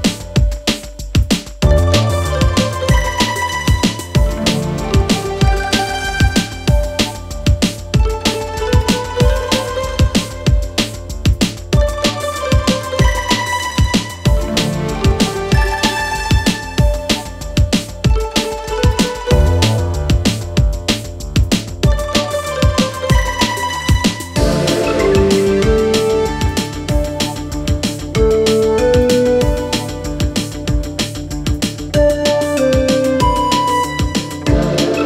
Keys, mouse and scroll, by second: 0.5 click, 1.4 Tab, 1.7 click, 2.1 click, 2.8 click, 3.3 click, 3.5-3.9 scroll up 1, 3.9 shift+a, 5.2 s, 6.3 s, 7.4 g, 9.0 g, 10.9 click, 11.3-11.8 scroll up 4, 11.8 click, 13.1 s, 14.2 s, 15.4 g, 18.1 click, 18.5 click, 19.7-20.3 scroll down 2, 20.3 click, 21.8 s, 25.3 click, 25.6-26.1 scroll up 2, 26.2 click, 27.1 shift+a, 28.4-28.8 scroll down 2, 28.8 s, 32.6 click, 32.9-33.3 scroll up 1, 33.3 g.